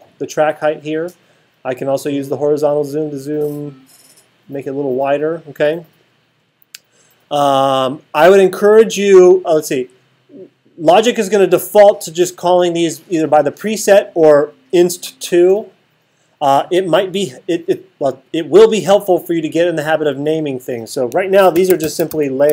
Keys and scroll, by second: 21.3-22.5 typing.